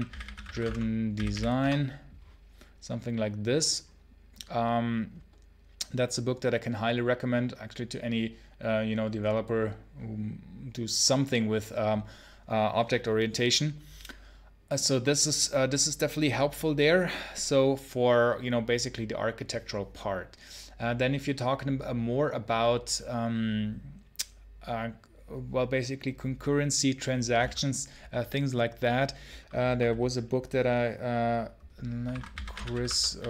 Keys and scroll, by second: 0.0-1.7 typing, 31.9 ctrl+t, 32.0-33.2 typing.